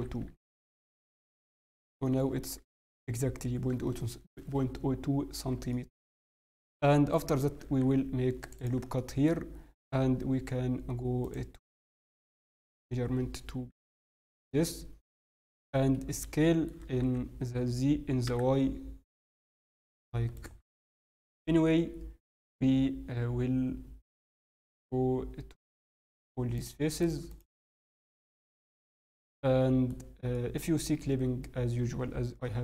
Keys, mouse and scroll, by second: 1.7 click, 2.1 shift+middle click, 2.4 shift+scroll up 2, 3.0 scroll, 3.5 scroll up 6, 3.7-4.4 scroll, 5.7 shift+middle click, 5.7 scroll down 10, 6.2-6.7 scroll, 6.7 middle click, 6.7 scroll down 1, 8.9 middle click, 9.3 scroll, 11.2 click, 11.2 scroll up 3, 13.7 n, 14.2 middle click, 15.9-16.5 scroll up 2, 16.4 shift+middle click, 17.0 s, 26.5 click, 27.3 click, 27.6 click, 28.0 click, 28.4 shift+middle click, 28.7 middle click, 30.1 scroll up 1, 30.3 middle click, 30.8 scroll up 1, 31.0 scroll, 32.2 scroll up 1, 32.3 m.